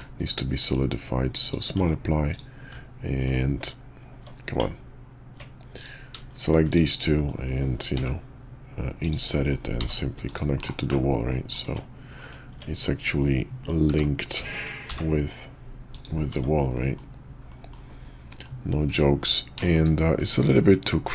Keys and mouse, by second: 1.7 Tab, 2.3 click, 2.7 Tab, 3.6 Tab, 4.6 Tab, 5.8 click, 6.7 shift+click, 7.1 middle click, 7.9 i, 9.3 middle click, 9.8 e, 10.6 /, 11.3 click, 11.6 Tab, 12.1 middle click, 12.5 Tab, 12.9 click, 13.8 g, 16.3 Tab, 16.7 middle click, 17.5 middle drag, 18.3 middle click, 18.9 `, 19.6 shift+click, 21.0-21.1 drag.